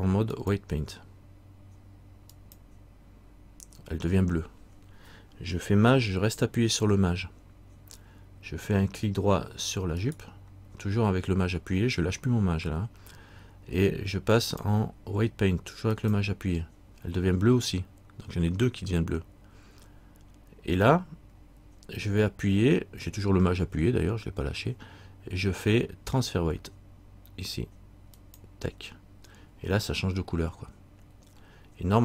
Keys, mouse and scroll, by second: 0.5 click, 10.2 shift+right click, 14.6 shift+click, 28.3 shift+click.